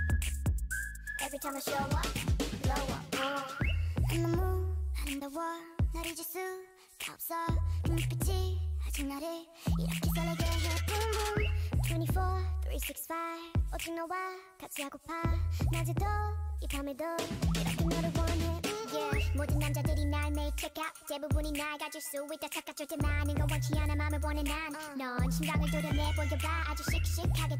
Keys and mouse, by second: 0.8 l, 1.3 r, 3.2 r, 4.3-6.3 typing, 8.5 g, 9.9-12.1 typing, 13.5 g, 16.1 r, 17.0 g, 19.4 a, 19.8 l, 20.7 r, 26.0 a.